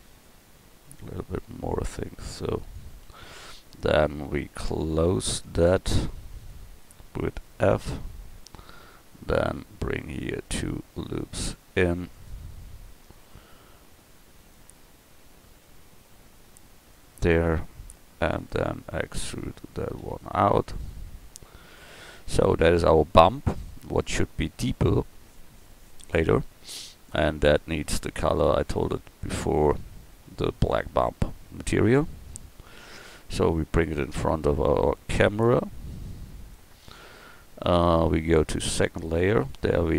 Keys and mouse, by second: 3.0-7.4 middle drag, 7.7 f, 9.5 ctrl+r, 11.7 ctrl+r, 20.0 e, 22.2 Tab, 28.8-31.4 drag, 34.1 click, 34.7 g.